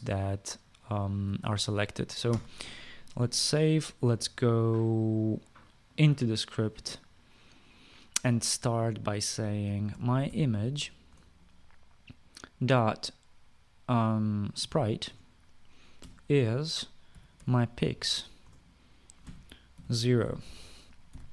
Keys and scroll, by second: 3.0 ctrl+s, 10.1-11.4 typing, 11.7 Return, 13.1-13.8 typing, 15.0-21.3 typing.